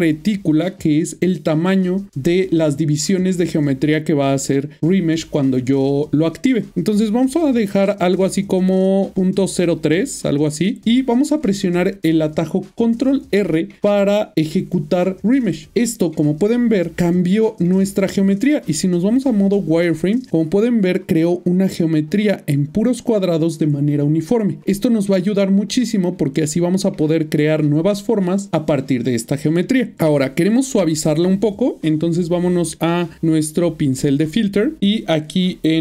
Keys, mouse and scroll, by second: 10.1 click, 16.2 ctrl+middle click, 18.8 typing, 19.9 middle click, 24.6-25.5 typing, 30.2 middle click, 34.3 click.